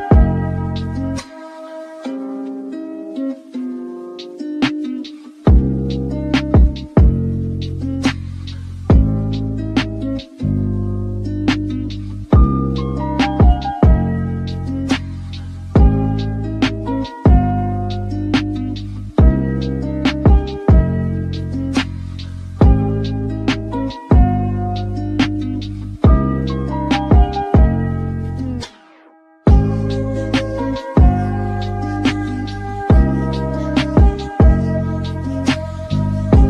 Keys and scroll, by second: 0.1-0.9 typing, 3.0-3.8 typing, 7.2 5, 7.3 Return, 12.5-14.0 typing, 24.5 space, 35.3-36.1 typing.